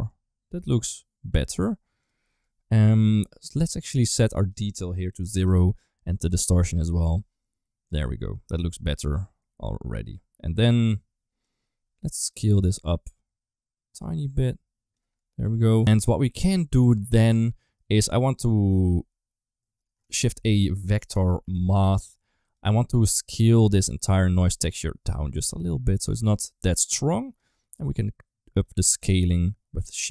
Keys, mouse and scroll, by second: 1.5 right click, 2.2 middle click, 3.2 middle click, 4.3 click, 6.1 click, 6.8-7.9 middle drag, 9.1 middle click, 10.6 click, 12.3-14.8 shift+drag, 15.0 middle click, 16.1 middle click, 16.9 click, 17.5 middle click, 18.0 click, 19.5 middle click, 19.9 shift+a, 22.9 click, 24.7-27.2 shift+drag, 27.8 click, 28.7 ctrl+z, 29.1-30.1 shift+drag.